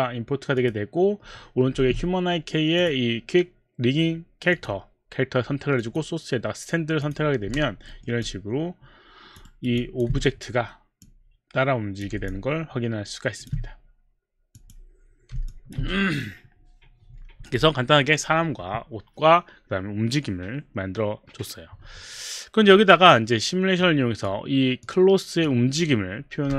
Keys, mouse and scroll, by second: 0.5 click, 2.8 click, 4.6 click, 5.8 click, 6.5 click, 7.0 click, 7.9 alt+middle click, 8.2 alt+click, 9.5 alt+right click, 9.8 alt+click, 11.0 click, 12.2 alt+click, 14.5 click, 15.5 alt+click, 23.8 click, 24.8 click.